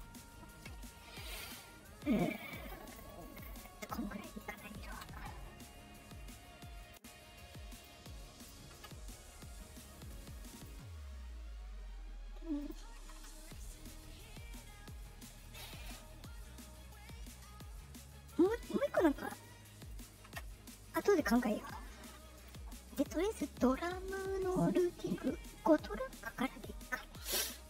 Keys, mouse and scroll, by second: 2.1-2.9 drag, 3.5 click, 4.3 click, 6.1 middle click, 6.1 scroll down 1, 6.7 click, 7.7 click, 8.3 click, 9.8 middle click, 10.5 click, 12.5 click, 13.1 Return, 15.0 middle click, 15.0 scroll, 18.1 middle click, 19.1 click, 19.8 click.